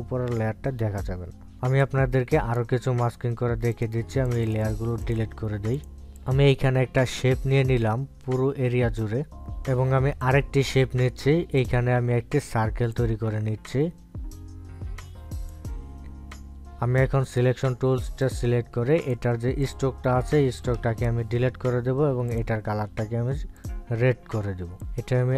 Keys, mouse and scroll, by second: 2.9-4.8 drag, 7.3-9.4 drag, 11.4-18.4 drag, 23.5 click.